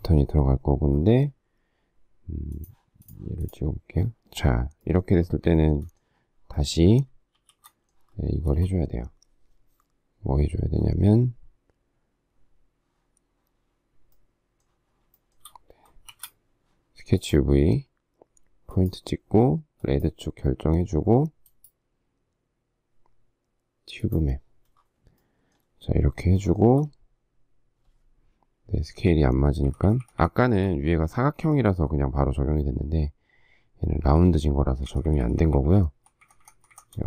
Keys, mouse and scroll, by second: 5.6 shift+middle click, 7.3 shift+s, 8.4 space, 15.2 shift+middle click, 16.1 shift+v, 26.4 shift+middle click, 29.3 shift+Left, 34.9 shift+Left.